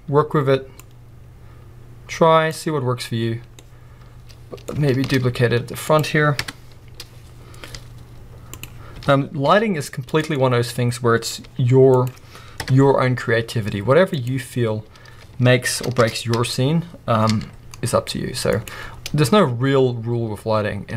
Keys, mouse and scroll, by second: 0.9-3.6 drag, 3.6-5.3 middle drag, 5.0 shift+d, 6.1-8.5 middle drag, 6.1 click, 6.4 KP_0, 7.7 g, 8.6 click, 9.0 g, 10.2 click, 10.3-12.1 middle drag, 11.5 g, 12.1 click, 12.6 KP_0, 13.6 g, 16.1 shift+d, 18.7 click.